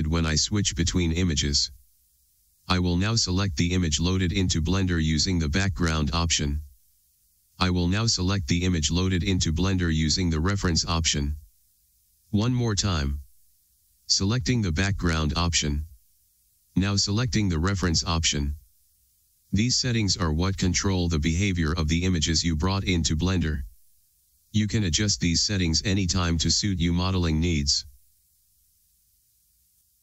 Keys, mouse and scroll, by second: 29.7 middle click.